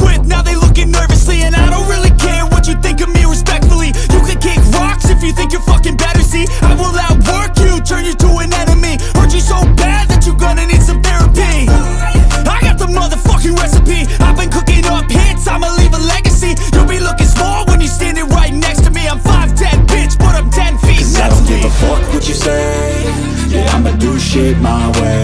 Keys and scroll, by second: 4.8 ctrl+space.